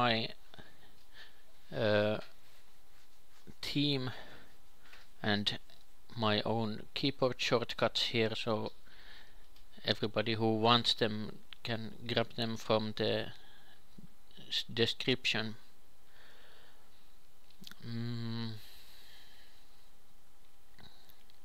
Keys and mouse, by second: 3.4 Tab, 4.1 ctrl+shift+KP_2, 4.3 ctrl+shift+KP_3, 5.1 shift+d, 7.3 Tab, 8.0-10.3 typing, 12.1 Tab, 12.5-14.2 drag, 12.8 shift+d, 16.2 Tab, 17.2-19.9 typing, 19.3-20.6 drag.